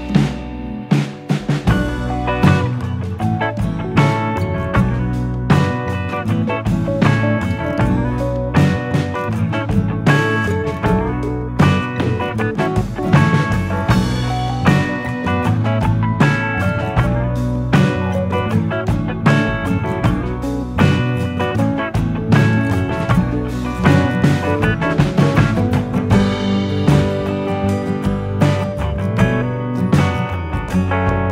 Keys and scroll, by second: 0.4-1.5 typing, 4.2 ctrl+=, 7.8 ctrl+-.